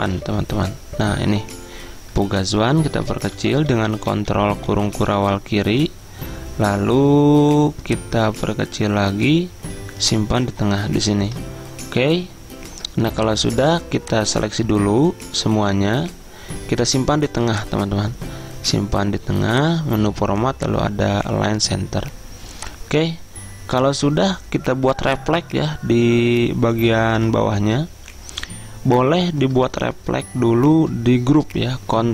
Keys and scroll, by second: 1.4 Return, 2.6-4.3 typing.